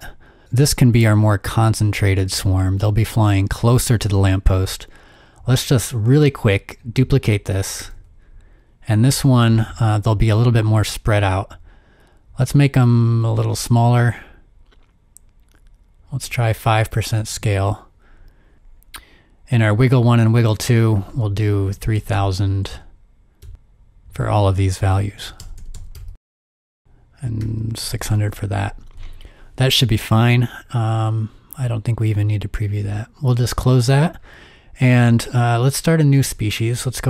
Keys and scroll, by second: 7.8 super+d, 9.1 super+d, 17.2 typing, 17.3 shift+Tab, 21.5-22.6 typing, 23.2 Tab, 23.5 Tab, 23.6 Tab, 24.8-28.4 typing, 33.9 super+w, 35.1 super+w.